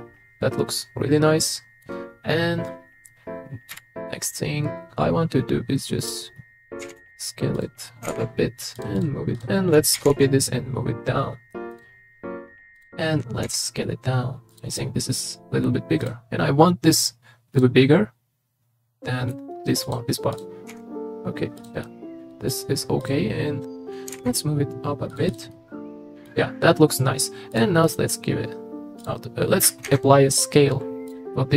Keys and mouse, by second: 3.7 KP_3, 6.8 s, 7.0 z, 8.0 g, 9.3 click, 9.9 shift+d, 10.1 z, 12.8 click, 13.4 s, 14.7 click, 16.0 drag, 17.8-18.5 drag, 18.5-19.3 middle drag, 20.7 s, 21.8-22.5 middle drag, 23.0 click, 24.1 g, 25.5-26.3 middle drag, 27.5 click, 27.9-29.1 drag, 29.8 ctrl+a.